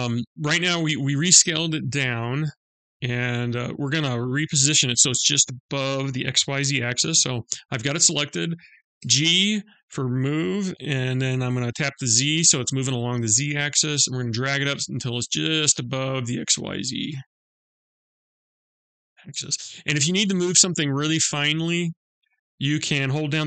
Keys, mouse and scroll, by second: 2.7 middle click, 7.3 click, 8.6 g.